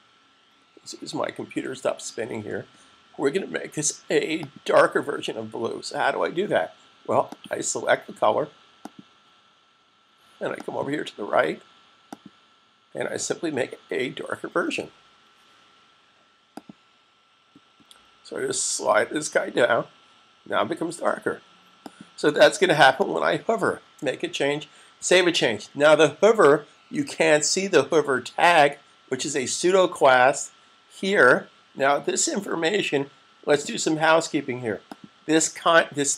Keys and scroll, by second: 25.4 super+s.